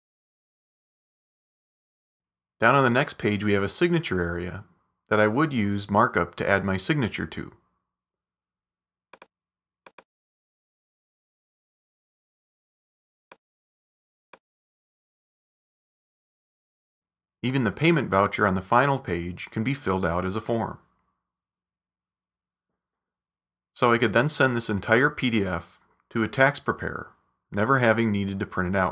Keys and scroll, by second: 0.1 Tab, 21.1-23.6 typing, 22.3 Tab, 25.0-27.9 typing.